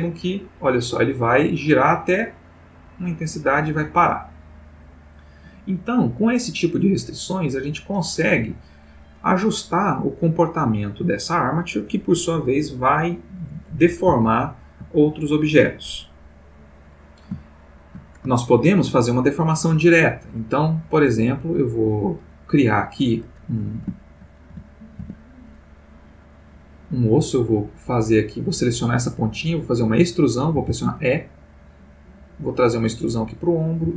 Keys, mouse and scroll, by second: 8.4 Escape, 14.3-15.0 ctrl+middle drag, 16.6 click, 17.5-18.1 shift+middle drag, 18.3-19.1 ctrl+shift+middle drag, 21.0 click, 24.0 shift+click, 24.5 shift+x, 25.0 shift+Tab, 27.9 click, 30.5 e, 33.1 click, 33.8 e.